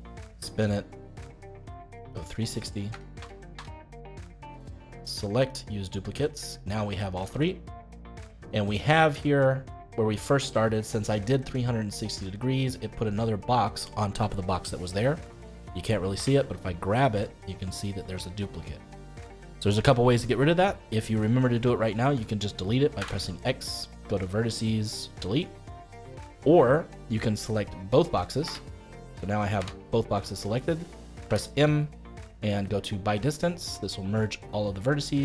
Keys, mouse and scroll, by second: 5.3 click, 6.4-9.4 middle drag, 16.1 g, 19.9-22.9 middle drag, 22.9 x, 25.7-28.4 middle drag, 28.4 l, 29.5 g, 31.2 m, 34.8-35.2 middle drag.